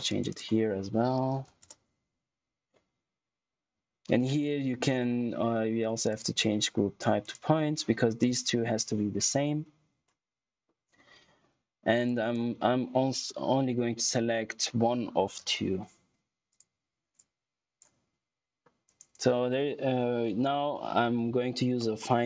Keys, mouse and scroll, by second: 1.0-1.9 typing, 6.0 click, 12.0 click, 16.4 click, 18.0 scroll down 1, 18.5 scroll up 1, 18.8 right click, 20.5-22.2 typing.